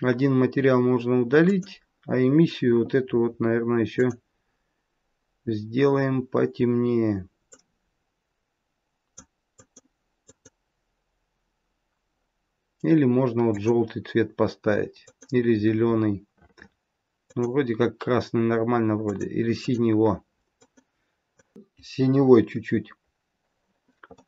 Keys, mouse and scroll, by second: 4.0 click, 22.7-23.3 scroll down 2, 24.1 middle click.